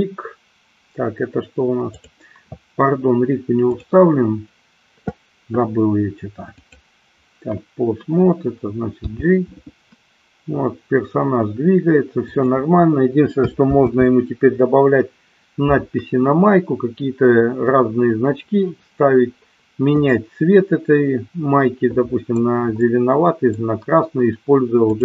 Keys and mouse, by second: 1.9 click, 3.6-4.8 drag, 6.6-7.2 drag, 8.9 g, 12.4 click, 14.1 ctrl+z, 20.2-22.6 middle drag, 22.9-23.7 middle drag.